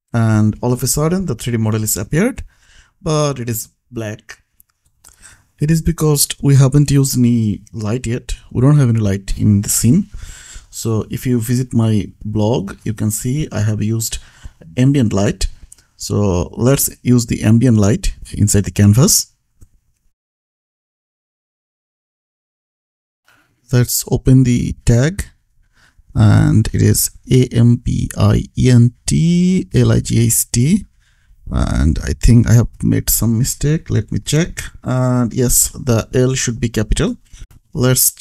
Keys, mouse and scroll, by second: 0.3 ctrl+s, 1.1 click, 1.4 Escape, 1.7 click, 6.2-7.0 scroll up 1, 7.0-8.0 scroll down 1, 8.0 click, 12.7 click, 14.0-14.5 scroll up 1, 14.5-15.5 scroll down 1, 15.5 click, 19.0 Down, 19.6 Up, 20.5 Return, 23.9 click, 27.3-28.5 typing, 29.7-32.0 typing, 33.5 click, 35.2 ctrl+c, 36.0 click, 36.6 ctrl+v.